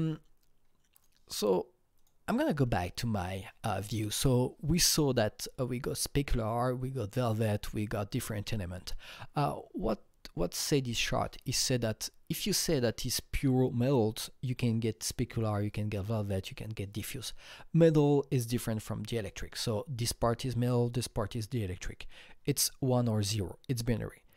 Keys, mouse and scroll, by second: 0.9 click, 2.0 click, 2.7 click.